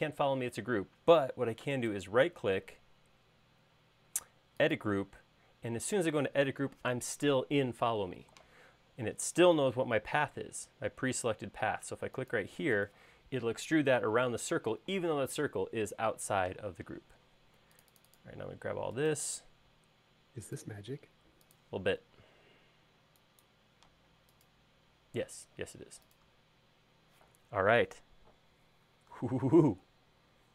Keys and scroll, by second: 16.9 space, 22.9 e, 24.0 space.